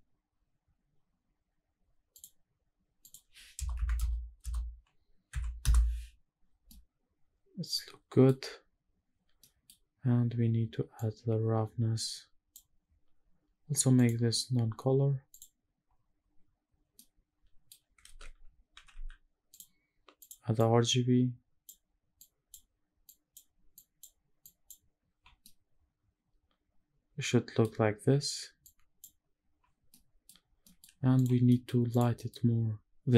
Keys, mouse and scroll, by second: 0.4-1.9 scroll up 1, 1.9-2.7 scroll up 1, 2.7-5.3 drag, 6.4-7.9 middle drag, 9.7 middle click, 9.7-10.7 scroll down 1, 10.7-12.2 drag, 13.7-15.2 drag, 16.7 middle click, 17.7 space, 20.2-21.4 drag, 21.9 click, 22.7 drag, 23.4 click, 24.1 click, 25.1-27.3 middle drag, 28.3 click, 29.6-29.9 middle drag, 30.0-30.3 scroll down 2, 30.3 middle drag, 30.8 click, 31.2 middle click, 31.6 click, 31.9 middle drag.